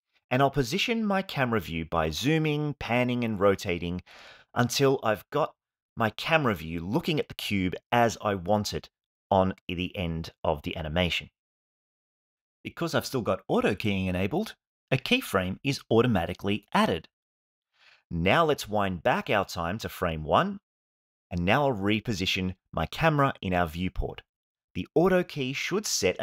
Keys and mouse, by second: 0.1-2.1 middle drag, 3.7-5.2 shift+middle drag, 5.5-6.7 middle drag, 7.9-9.6 shift+middle drag, 22.4 g, 23.6-24.6 ctrl+middle drag, 24.8-26.2 shift+middle drag.